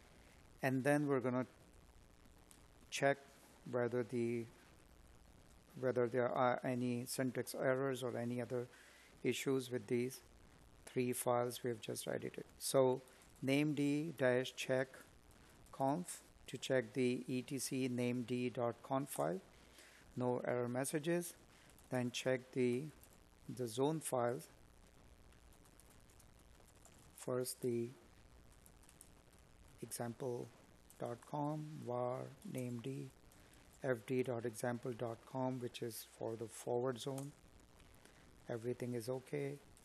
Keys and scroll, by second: 20.2 Tab, 22.0 space, 25.6 space, 30.1 Tab, 37.5 Tab.